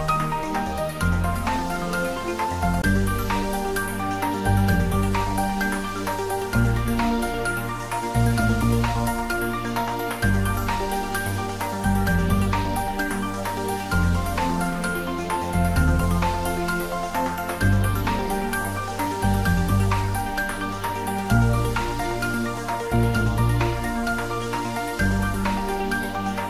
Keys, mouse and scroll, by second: 3.5 click, 3.6-4.0 typing, 8.5-9.0 typing, 12.1-14.8 middle drag, 14.8-16.7 scroll up 1.